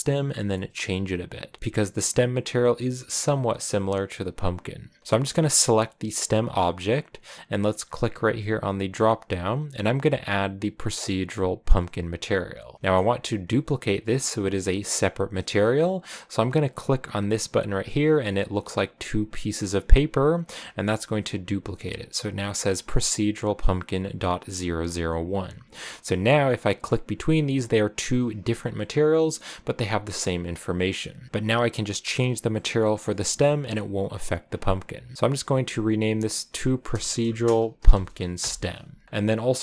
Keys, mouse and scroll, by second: 1.6-3.0 scroll down 1, 5.0-11.5 right drag, 11.5 click, 12.9 click, 19.7 click, 22.9-25.0 drag, 25.8 right click, 26.5 Right, 26.5 right click, 26.8 Right, 27.2 Right, 27.2 right click, 28.2 right click, 28.6 right click, 30.4 right click, 31.3 g, 35.1-38.2 drag, 39.3 scroll down 3.